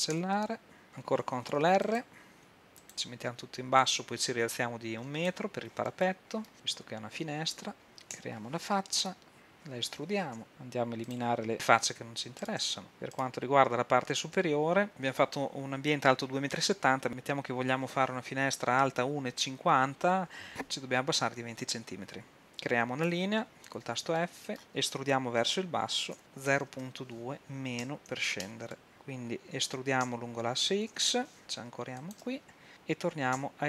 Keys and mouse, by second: 0.2 x, 1.4 ctrl+r, 3.9 click, 5.1 right click, 6.0-7.0 drag, 6.5 ctrl+r, 8.2 f, 10.4 e, 13.2-14.9 middle drag, 23.1 f, 24.3 click, 25.5 e, 30.1 e, 33.4 e.